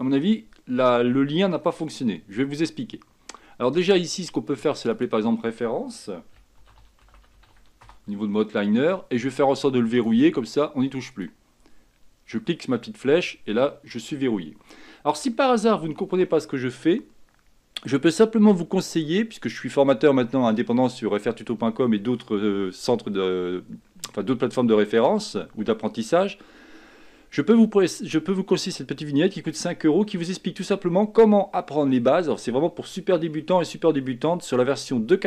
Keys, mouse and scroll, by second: 4.9-15.8 drag.